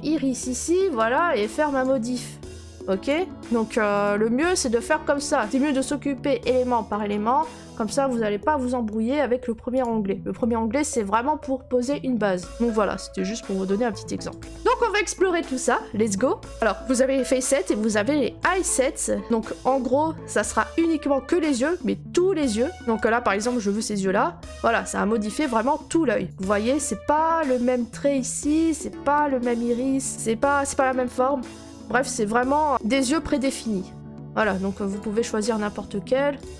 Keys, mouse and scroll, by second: 0.0 middle click, 0.1 middle click, 1.8 click, 3.0 click, 4.0 click, 9.8 click, 12.5-12.8 scroll, 14.3 click, 14.3 scroll, 16.6 click, 23.0 click, 33.3 click, 34.2 scroll, 34.9 click, 35.2 scroll, 36.4 click.